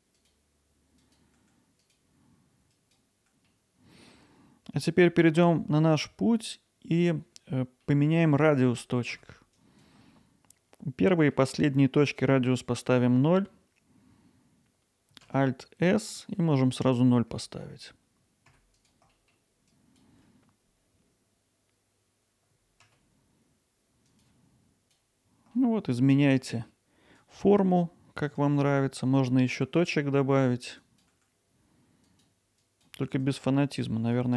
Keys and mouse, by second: 0.5 g, 1.3 Tab, 1.5 click, 1.5 g, 2.5 Tab, 3.0 alt+middle drag, 3.5-4.1 alt+middle drag, 7.0 alt+middle click, 7.9 middle click, 9.2 Tab, 9.7 drag, 15.2 alt+s, 18.2 0, 18.3 click, 18.4 middle click, 18.7 click, 19.7 alt+s, 20.1 click, 20.6 0, 21.3 alt+s, 21.7-24.6 typing, 21.9 Return, 22.1 click, 22.6 click, 23.1 click, 23.5 click, 24.2 click, 24.5 middle click, 27.2-28.4 drag, 28.4-30.8 right drag, 30.8 click, 31.1 g, 32.1-34.1 drag, 34.2 ctrl+z.